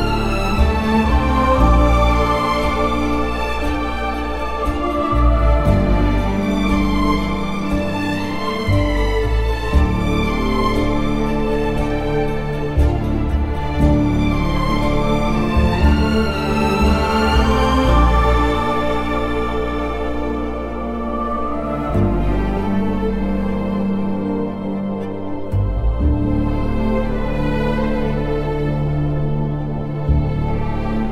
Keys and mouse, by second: 0.1 Tab, 1.3 Tab, 3.5 Tab, 5.9 Tab, 6.3 2, 6.7 alt+click, 7.5 Tab, 10.2 Tab, 11.4 ctrl+KP_Add, 12.4 a, 13.2 s, 13.4 x, 15.8 click, 17.5 g, 17.8 x, 20.9 click, 22.6 KP_3, 25.5 1, 26.0 alt+z, 27.8 o, 28.2 click, 30.6 g.